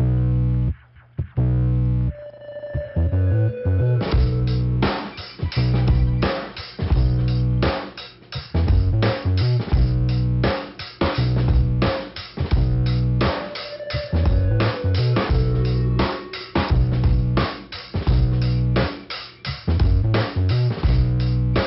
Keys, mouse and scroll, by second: 0.2 click, 1.8 click, 3.6 click, 4.4 click, 5.5 click, 7.3 click, 8.4 click, 9.9 click, 10.5 click, 11.5 click, 11.6 click, 12.5 click, 13.3 click, 14.0 click, 14.8 scroll down 2, 15.6 click, 16.1 click, 16.2 double click, 16.9 double click, 18.3 click, 19.3 click, 20.1 click.